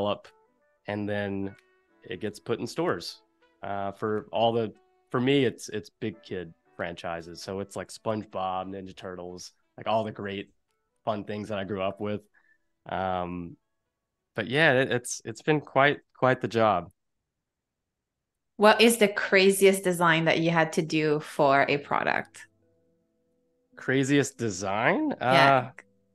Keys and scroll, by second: 2.3 super+-, 4.3 space, 8.4 super+=, 14.8 z, 16.0 v, 19.4 super+-, 20.5 space, 23.8 super+=, 24.1 space.